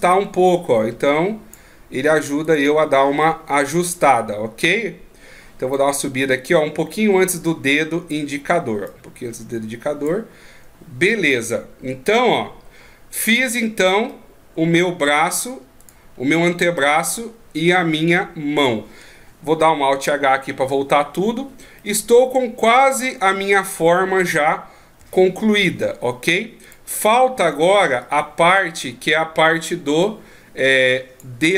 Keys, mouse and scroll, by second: 0.1 click, 2.5 right click, 3.2 middle click, 5.8 click, 8.8 click, 14.1 middle click, 15.8 right click, 16.2-16.8 scroll down 2, 16.8 middle click, 16.8 scroll down 2, 20.6 alt+h, 21.8 middle click, 23.8 KP_3, 25.0 KP_1, 25.8 scroll up 2, 26.6 right click, 28.0 click, 30.0 click.